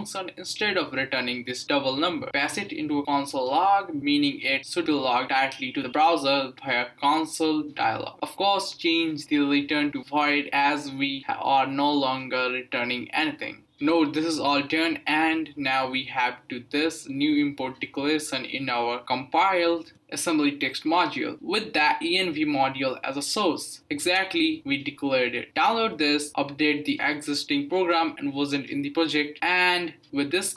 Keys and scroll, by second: 0.6 Right, 1.6 super+v, 1.8-6.0 typing, 1.9 Left, 1.9 Left, 2.0 Left, 2.1 Left.